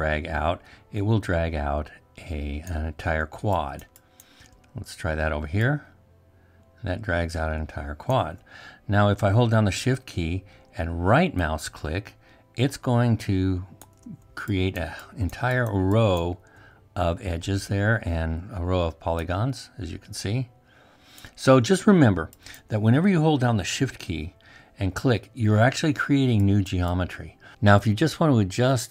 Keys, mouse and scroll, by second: 10.7-14.4 shift+right drag.